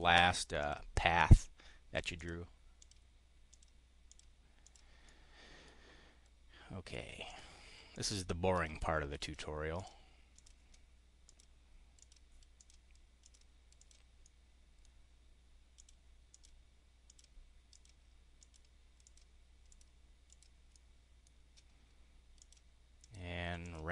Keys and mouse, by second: 0.5 click, 1.1 click, 2.1 click, 2.7 click, 3.4 click, 3.9 click, 4.5 click, 4.9-5.5 drag, 7.2 click, 7.8 click, 8.4 click, 9.1 click, 9.6 click, 10.2 click, 11.1 drag, 11.9 click, 12.5 click, 13.1 click, 13.6 click, 14.1 click, 15.6 click, 16.2 click, 16.9 click, 17.6 click, 18.2 click, 18.9 click, 19.5 click, 20.2 click, 20.6 click, 22.2 click, 22.9 click, 23.5 click.